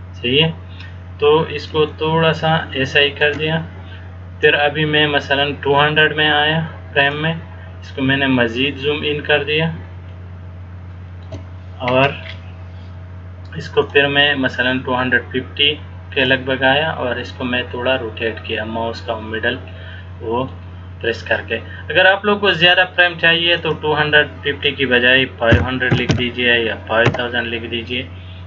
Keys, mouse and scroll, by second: 2.0 shift+middle click, 4.7 click, 8.0-9.0 scroll down 4, 10.3 shift+middle click, 14.1 click, 17.3 middle click, 23.7 click, 26.3 KP_0.